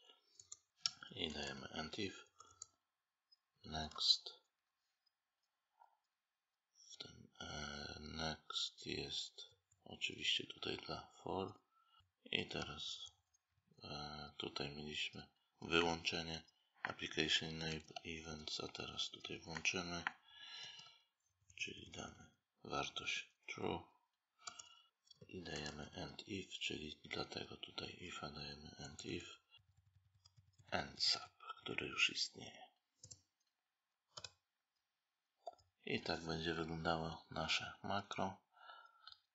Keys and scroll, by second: 1.2 space, 17.5 ctrl+c, 20.4 ctrl+v, 24.9 space, 29.5 Delete.